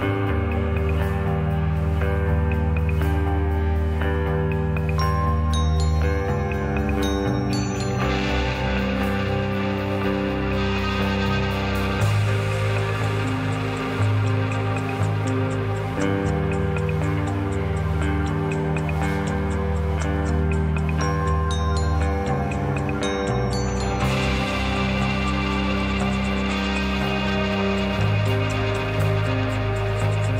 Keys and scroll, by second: 4.9 1.